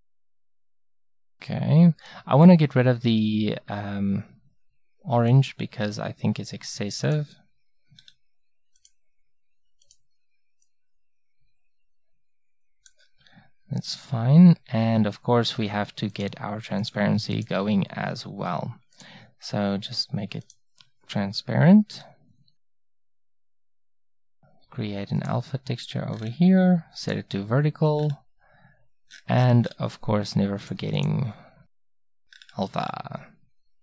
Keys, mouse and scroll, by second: 5.4-12.6 drag, 16.2-22.0 drag, 22.0-24.2 middle drag, 24.2-28.8 drag, 28.8-30.6 middle drag, 30.6-32.7 drag, 32.7-33.8 middle drag.